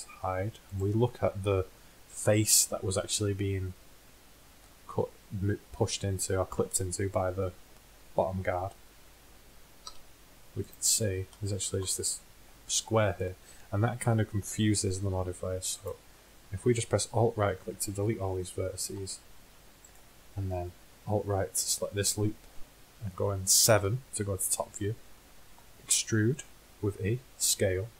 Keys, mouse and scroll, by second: 0.4 h, 2.7 middle click, 9.9 z, 10.4 middle click, 11.1 Tab, 14.6 Tab, 18.9 x, 23.9 KP_7, 26.0 e.